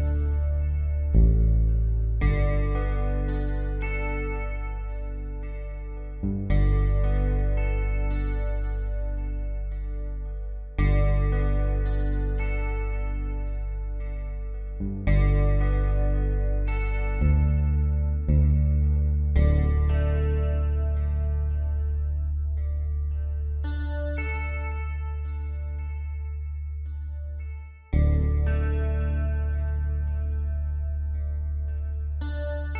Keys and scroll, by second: 1.0-2.3 typing, 9.4 space, 11.3 space, 12.3 p, 14.0 space, 19.5 ctrl+z, 19.9 F3, 20.5-23.5 typing, 21.5 ctrl+z, 24.6-30.1 typing, 31.3 space, 32.6-32.7 typing.